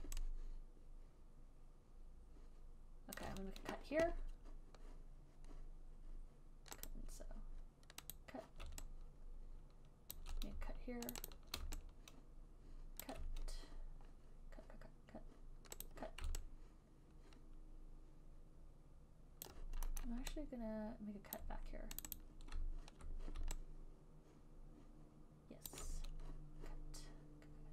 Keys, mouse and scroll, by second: 0.0 alt+right click, 0.3 alt+click, 3.5 alt+click, 3.6 alt+middle click, 7.2 click, 8.5 click, 10.5 alt+click, 11.5 shift+click, 11.6 shift+click, 13.3 alt+click, 16.2 click, 19.3 click, 19.5 click, 19.8 alt+click, 20.3 alt+middle click, 21.6 alt+click, 22.3 click, 22.5 click, 22.6 alt+click, 25.6 alt+click, 26.0 alt+click.